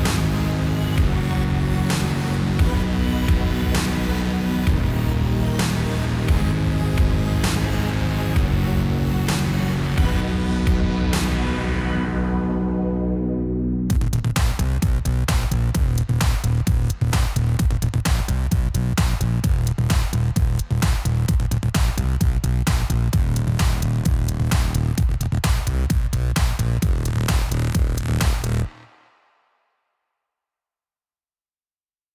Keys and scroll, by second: 11.3 shift+a, 19.9 Tab, 21.6 ctrl+a, 22.3 2, 22.6 0.